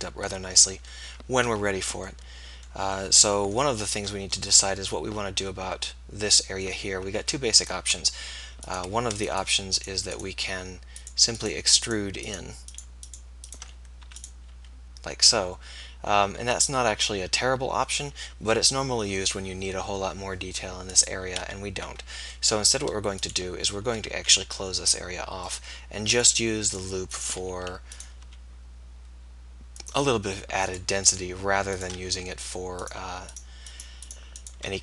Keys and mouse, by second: 1.1-2.4 middle drag, 3.7-5.2 middle drag, 14.2 e, 14.8 s, 21.4 ctrl+z, 24.0 e, 27.5 f, 28.4 e, 32.0 f.